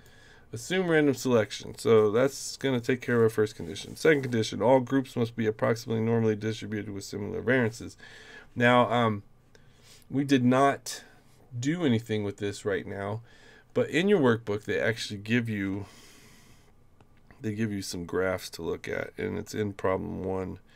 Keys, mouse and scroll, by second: 0.6 click.